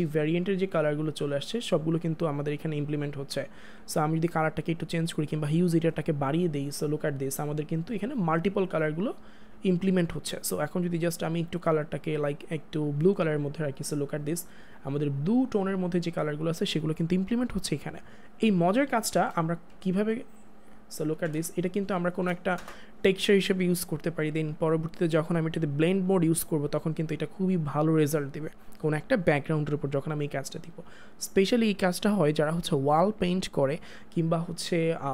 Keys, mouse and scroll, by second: 3.8 ctrl+z, 5.3 click, 11.4 click, 12.1 click, 18.7 click, 19.0 ctrl+t, 19.7 alt+click, 21.4 space, 22.6 Return, 25.5 click.